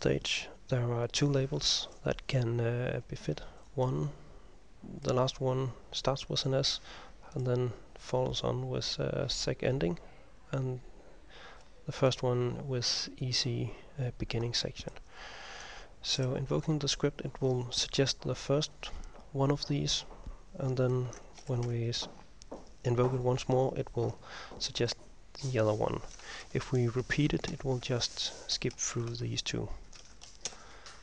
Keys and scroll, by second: 0.0-0.6 typing, 16.3 ctrl+m, 21.5 ctrl+m, 26.5 ctrl+m, 27.6 ctrl+m, 29.0 Home, 29.2 End, 30.1 }.